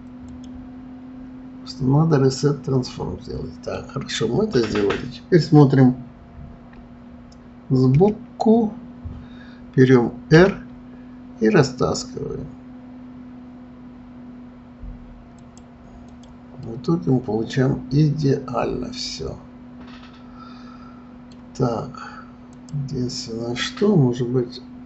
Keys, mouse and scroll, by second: 0.3 click, 2.9-5.9 middle drag, 7.9 KP_1, 10.3 r, 16.0 click, 16.6-19.6 middle drag, 22.5 click.